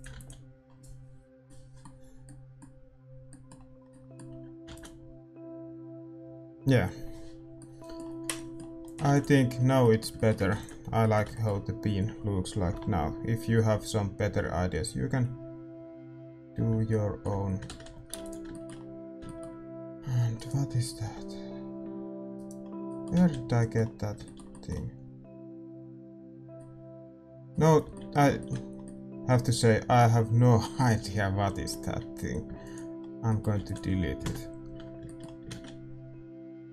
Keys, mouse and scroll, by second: 0.0-18.8 drag, 1.4 ctrl+s, 1.4-21.0 middle drag, 10.3 ctrl+s, 18.8 shift+z, 19.8 a, 21.0 g, 27.8 z, 29.4-30.7 middle drag, 32.7 x, 33.0-34.2 middle drag, 34.2 ctrl+s, 34.2 KP_0.